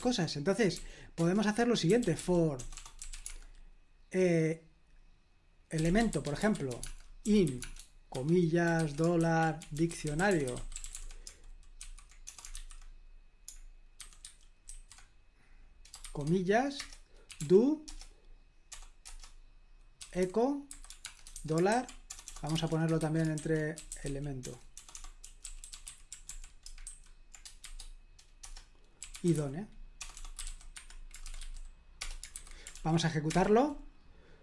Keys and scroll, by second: 0.7-3.6 typing, 1.2 Return, 5.5-12.5 typing, 14.0-14.7 typing, 17.0-18.7 typing, 19.0 Return, 19.7-27.6 typing, 28.4 Return, 28.8-31.7 typing, 32.0 Return, 32.3 super+h, 32.7 ctrl+p, 33.3 Return.